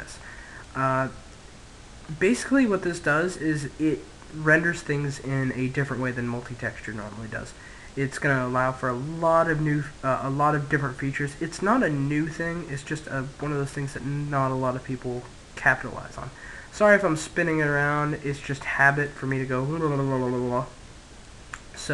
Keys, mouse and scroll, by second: 0.2-0.6 scroll up 1, 0.6-6.5 middle drag, 7.1-9.7 middle drag, 13.0-15.8 middle drag, 18.8-21.0 middle drag.